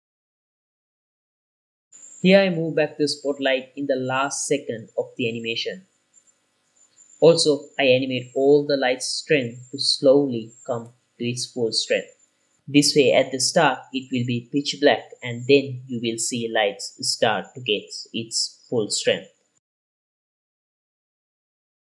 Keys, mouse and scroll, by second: 0.0 click, 0.1 click, 0.3 click, 0.7 click, 1.1 click, 1.3 click, 1.6 click, 1.7 click, 2.0 click, 2.3 ctrl+s, 2.3 click, 2.4 click, 3.4 i, 3.9 click, 4.7 g, 4.8 y, 6.2 click, 6.4 i, 7.0 t, 7.5 click, 7.7 click, 8.2 ctrl+s, 8.3 scroll up 3, 8.5 ctrl+s, 8.9 scroll down 4, 9.0 ctrl+s, 9.6 click, 9.7 ctrl+s, 10.0-10.4 scroll down 1, 10.4 click, 10.5 click, 11.2 click, 11.7 click, 12.2-13.9 drag, 13.9 scroll down 2, 14.0 middle click, 14.2 click, 14.8 click, 15.5 click, 16.7-18.0 drag, 18.0-18.5 drag, 19.0 click, 20.8 click, 21.6 click.